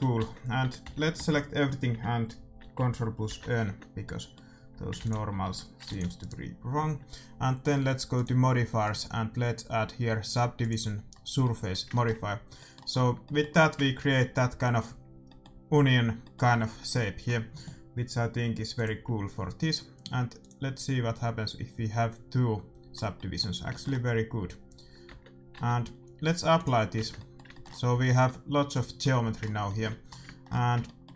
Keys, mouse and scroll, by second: 0.1 Tab, 0.8 a, 1.1 a, 3.2 ctrl+n, 3.6 Tab, 4.0-7.7 middle drag, 4.7 a, 4.9 ctrl+s, 5.3 a, 5.8 ctrl+s, 6.2-7.9 right drag, 8.1-10.6 drag, 11.1-16.5 middle drag, 18.7-22.2 drag, 22.9 scroll up 1, 23.1-25.5 middle drag, 25.0 Tab, 25.5 Tab, 25.5-26.5 scroll up 1, 26.5-28.3 drag, 26.8 scroll up 1, 26.9 Tab, 27.1-31.1 middle drag, 27.8 a.